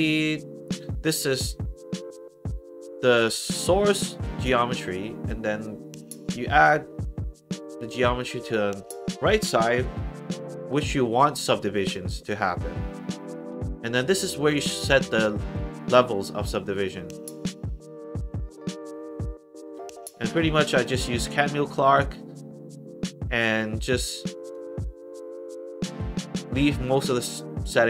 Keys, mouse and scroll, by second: 14.8 click, 16.7 click, 20.3 click, 20.8 click, 23.7 click, 24.4 click.